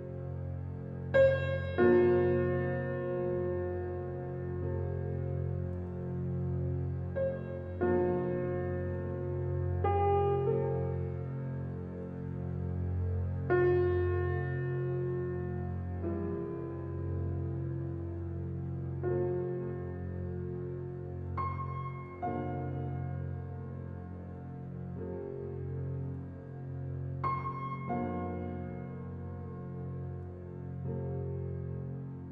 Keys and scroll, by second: 18.6 ctrl+c, 20.0 ctrl+v, 22.2 ctrl+t.